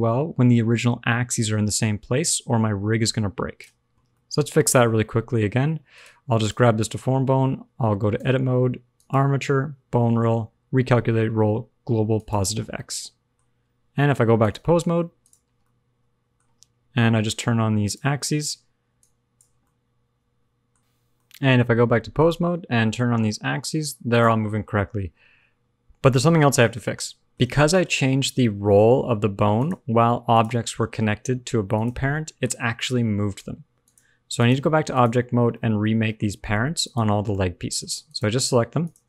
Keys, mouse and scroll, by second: 4.0 middle click, 4.4-5.9 scroll up 2, 4.6 middle click, 5.9 click, 6.3 click, 8.2 Tab, 8.9 click, 12.6-14.3 scroll down 2, 12.7 middle click, 14.3 click, 15.6 middle click, 17.3 click, 18.9 click, 19.6 middle click, 22.1 click, 22.8 g, 24.4 alt+r, 24.4 alt+g, 26.4 middle click, 27.5 shift+middle click, 28.3 middle click, 29.7 click, 30.2 click, 31.7 click, 32.1 middle click, 33.8 click, 34.8 click, 35.5 middle click, 36.0 shift+middle click, 36.4-36.8 scroll up 1, 36.8 shift+click, 37.3 middle click, 38.0 click, 38.8 shift+click.